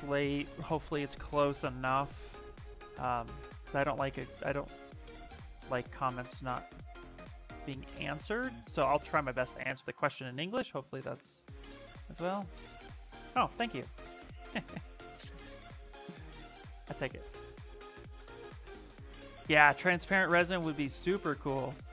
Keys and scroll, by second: 1.4-2.4 typing, 2.7 Return, 3.2 Caps_Lock, 6.1-7.2 typing, 8.8 Return, 10.9 ctrl+v.